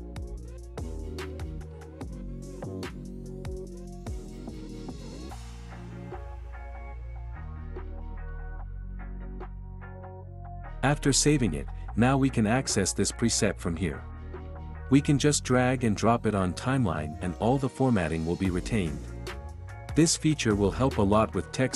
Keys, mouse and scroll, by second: 2.1-3.1 drag, 6.8-9.7 drag, 12.8-13.8 drag, 14.7-15.7 drag, 20.4-21.6 drag, 21.6 space.